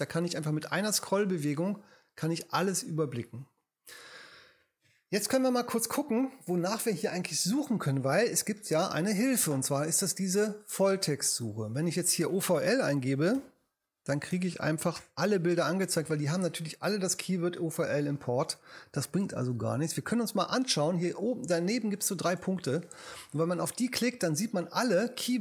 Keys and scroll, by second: 13.4 o, 15.0 l, 19.2 BackSpace.